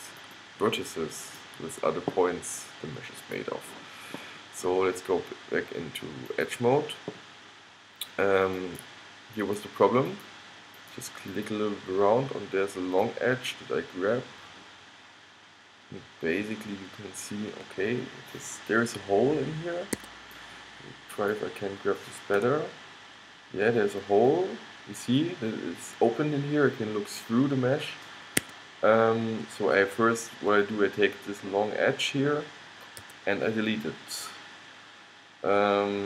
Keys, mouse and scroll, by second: 2.6 middle click, 3.4-5.6 middle drag, 6.4-8.6 middle drag, 8.7 middle click, 14.6 click, 22.5 g, 33.1 x.